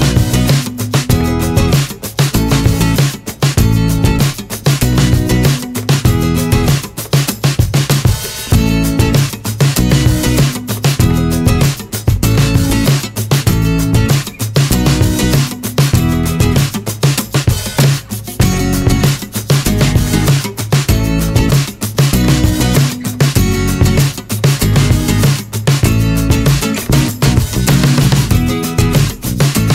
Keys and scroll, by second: 3.5 1, 7.7 r, 10.7 space, 11.8 r, 15.3 space, 18.8 alt+r, 21.1 w, 23.3 w.